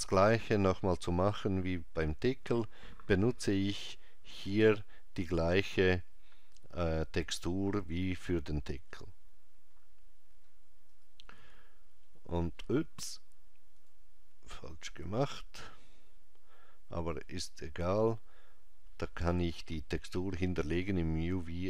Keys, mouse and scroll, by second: 7.9 click, 13.8 click, 16.2 scroll down 1, 16.8 scroll down 3, 20.1 scroll down 4.